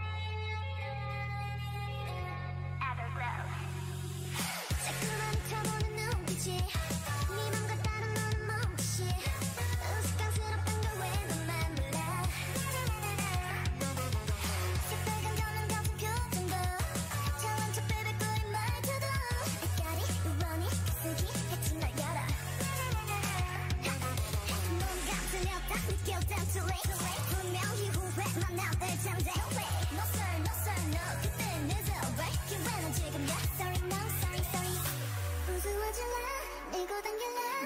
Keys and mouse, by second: 0.6 z, 2.6-4.5 drag, 33.0 middle click, 34.0 middle click, 34.8 click, 35.6-37.6 middle drag.